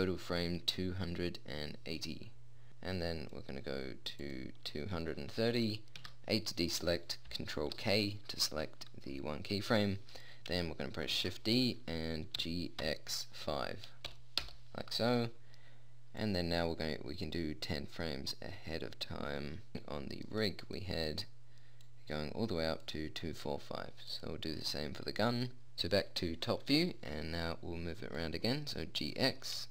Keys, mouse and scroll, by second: 1.7-2.6 scroll down 1, 4.3 middle click, 6.3 a, 7.9 ctrl+k, 11.5 shift+d, 16.6-18.3 drag, 18.3-19.7 middle drag, 19.7 click, 20.9-22.2 right drag, 22.2 middle click, 22.5-24.5 drag, 22.5 right click, 24.5-25.7 right drag, 25.7 ctrl+z, 28.5-29.7 drag.